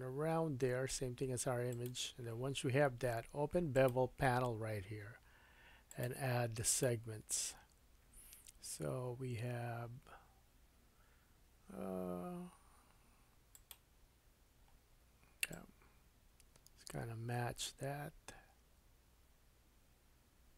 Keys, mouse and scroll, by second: 3.7-9.7 drag, 13.5 click, 15.5 click.